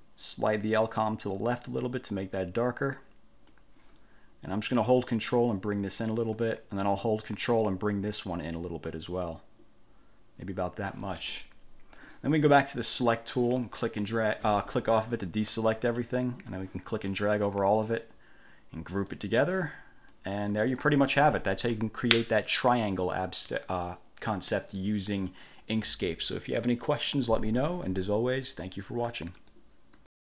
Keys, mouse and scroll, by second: 0.8-3.9 drag, 5.2-6.6 ctrl+drag, 7.8-11.2 ctrl+drag, 12.8 click, 14.2 click, 15.0 click, 16.7-17.9 drag, 19.2 click, 20.3-21.2 drag, 29.6 click, 30.1 click.